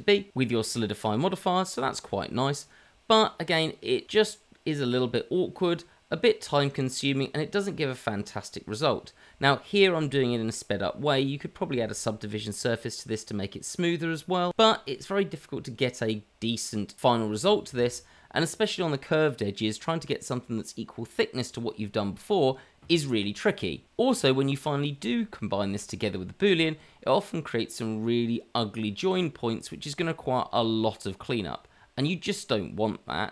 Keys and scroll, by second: 3.7 Tab, 4.2 Tab, 4.7 Tab, 6.0 Tab, 6.6 Tab, 7.2-12.8 typing, 14.1 e, 15.0 e, 15.4 e, 16.1 e, 18.1 Tab, 18.4 Tab, 19.7-24.2 typing, 26.1 e, 26.5 e, 26.8 e, 27.8 Tab, 28.8 Tab, 30.6-32.9 typing, 31.9 ctrl+z.